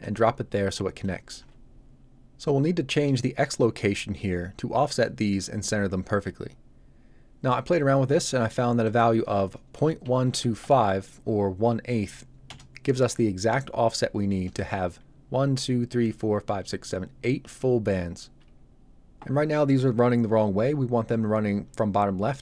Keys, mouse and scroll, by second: 3.1 shift+click, 8.8 click, 10.0 KP_1, 10.2 KP_2, 10.5 KP_5, 12.4 Return.